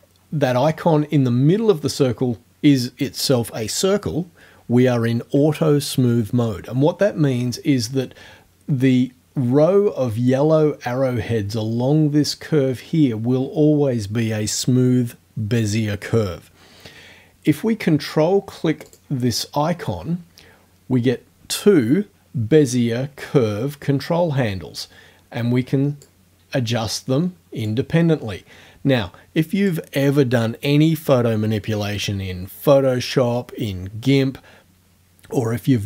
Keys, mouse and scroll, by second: 18.9 ctrl+click, 20.6-26.2 drag, 27.7-29.9 drag.